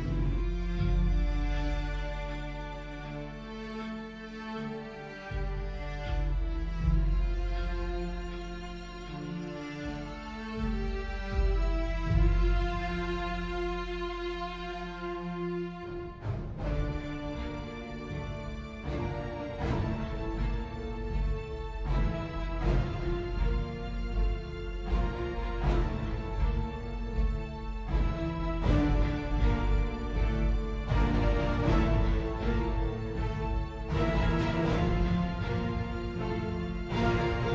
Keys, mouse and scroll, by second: 22.2 ctrl+z.